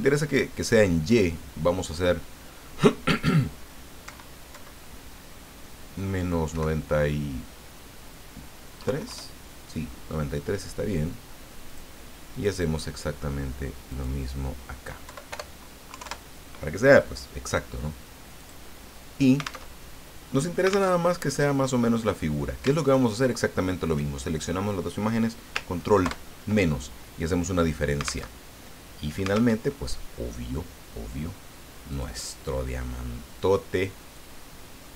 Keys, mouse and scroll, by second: 1.1 click, 4.1 Right, 4.5 Left, 6.5 Delete, 8.9 KP_3, 9.1 KP_Enter, 11.7 click, 12.3 click, 13.9 click, 15.0 Left, 16.0 KP_Enter, 18.4 click, 19.7 alt+Tab, 21.0 alt+Tab, 21.5 click, 22.8 shift+click, 26.0 ctrl+KP_Subtract, 28.3 alt+Tab, 29.6 alt+Tab, 31.9 click, 34.1-34.9 drag.